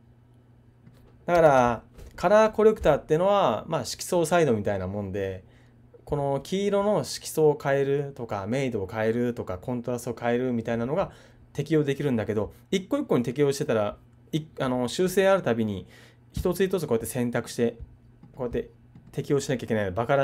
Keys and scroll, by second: 1.4 super+z.